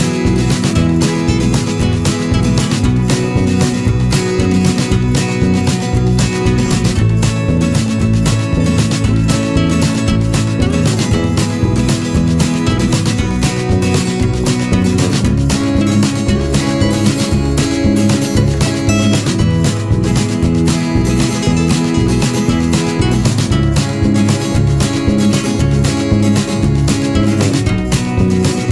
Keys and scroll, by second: 16.4 ctrl+-, 28.0 ctrl+-, 28.3 ctrl+0.